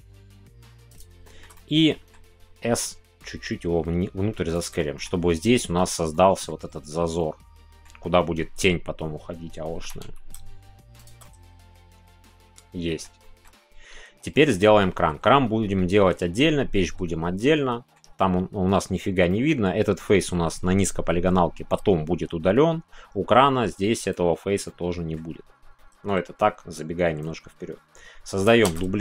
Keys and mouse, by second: 0.9 click, 1.3 shift+middle click, 1.5 middle click, 4.5 click, 4.7 middle click, 6.1 middle click, 7.2 middle click, 10.9 click, 11.2-13.0 middle drag, 13.2 shift+click, 13.3 shift+middle click, 14.6 middle click, 17.3 middle click, 19.2 middle click, 24.6 middle click, 25.7-28.5 middle drag, 28.6 shift+d.